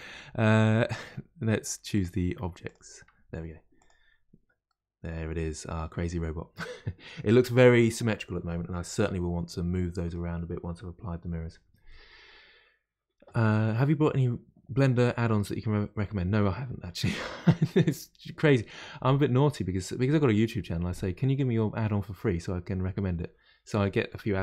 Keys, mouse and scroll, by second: 1.9 click, 3.7 click, 4.2-4.6 scroll down 1, 4.6-9.0 middle drag, 9.4-12.4 middle drag.